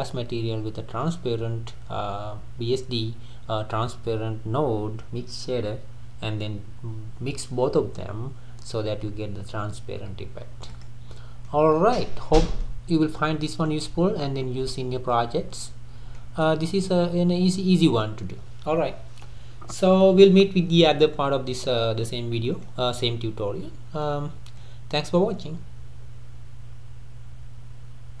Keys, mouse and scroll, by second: 10.8 click, 11.1-11.6 middle drag, 11.6-12.1 scroll up 3, 12.1-12.9 middle drag, 12.9 scroll down 2, 13.2-15.8 middle drag, 15.8-16.2 scroll down 2, 16.2-17.0 middle drag, 17.0-17.5 scroll up 3, 17.5-28.2 middle drag.